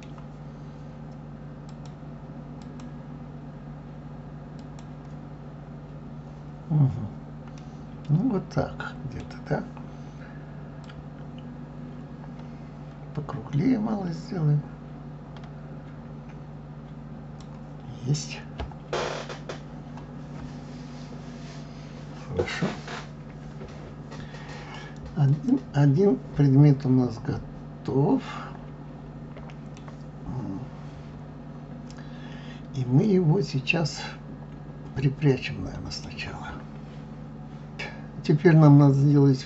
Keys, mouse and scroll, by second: 1.7-3.2 drag, 4.6 click, 5.4 scroll down 2, 6.1-7.6 scroll up 1, 7.6-10.6 middle drag, 10.8-13.8 drag, 18.1 click, 25.3 click, 26.8-29.8 middle drag, 33.0-36.0 middle drag.